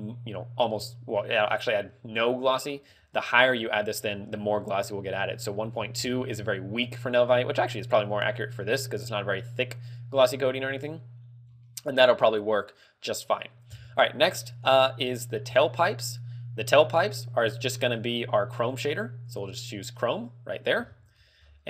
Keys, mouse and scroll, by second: 1.3 middle click, 2.7 middle click, 3.9 ctrl+click, 15.5 right click, 18.3 click, 21.4-21.6 scroll up 7.